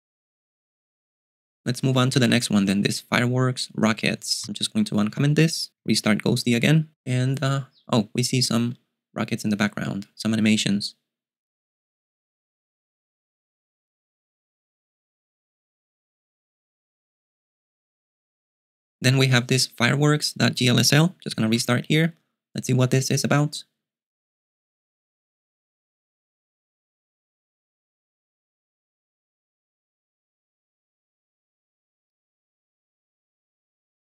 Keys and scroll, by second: 1.8-4.9 typing, 6.2 super+q, 21.7 super+q.